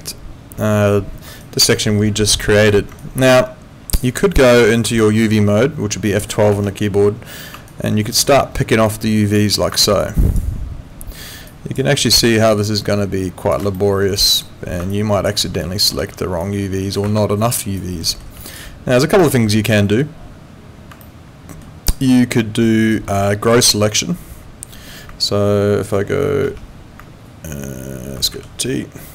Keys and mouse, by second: 3.0 alt+right click, 5.0 alt+middle click, 6.5 F12, 7.7 alt+right click, 8.8 click, 11.5 ctrl+shift+click, 13.8 alt+middle click, 14.9 ctrl+shift+click, 15.6 alt+right click, 16.0 w, 16.4 click, 17.0 ctrl+z, 17.5 alt+right click, 18.1 alt+middle click, 18.5 click, 19.2 alt+middle click, 19.5 alt+right click, 21.0 alt+middle click, 26.4 ctrl+2.